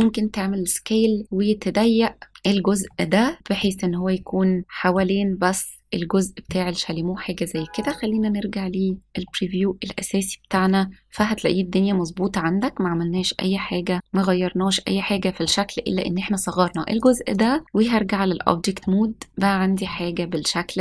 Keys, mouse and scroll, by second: 2.3 click, 2.8 middle click, 3.8-4.1 scroll down 1, 4.6 middle click, 4.6-5.0 scroll down 3, 5.6-5.9 scroll up 2, 7.9 click, 9.1 middle click, 9.7-10.1 scroll up 2, 10.4 middle click, 12.1-12.7 scroll down 1, 12.7 scroll up 1, 13.1 middle click, 14.4-14.9 scroll down 1, 15.0 scroll down 2, 15.1 middle click, 16.6 click, 17.3 click, 17.6 middle click, 17.6 scroll up 1, 18.3-18.8 middle drag, 19.3-19.6 scroll down 1, 19.8-20.8 middle drag, 19.8-20.4 scroll down 1.